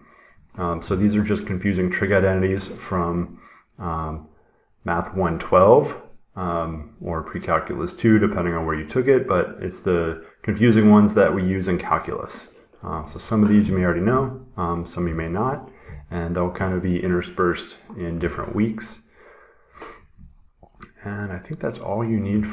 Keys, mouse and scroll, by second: 20.2 scroll, 20.3 scroll down 1, 20.4 scroll, 20.7 scroll down 2, 21.0-21.6 scroll.